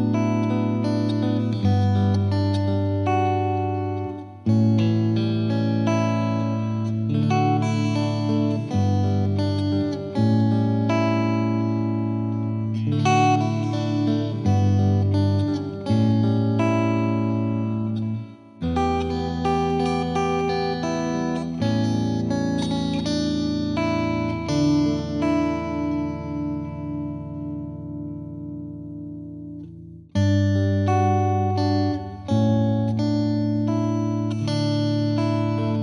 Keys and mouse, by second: 0.3 shift+click, 4.1 shift+click, 4.8 ctrl+right click, 5.1 ctrl+click, 6.8 click, 7.0 click, 9.0 click, 14.4 click, 15.8 click, 17.7 click, 22.6 click, 23.3 click, 25.6-26.7 drag, 29.0-30.2 drag, 31.8 click, 33.5 click.